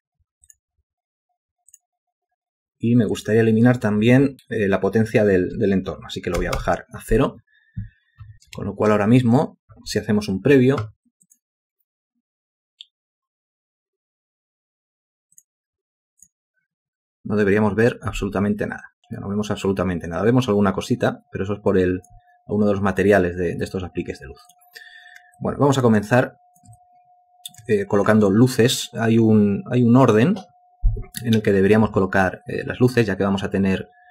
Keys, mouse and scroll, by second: 6.4 0, 6.6 Return, 8.6 ctrl+space, 25.4 alt+click, 26.2 alt+shift+click, 26.8 alt+click.